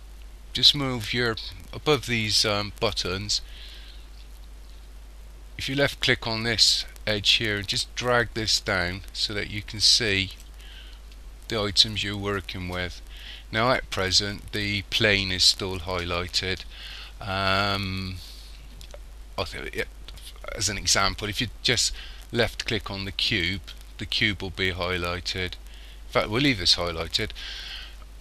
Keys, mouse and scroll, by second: 5.8 click, 23.1 click.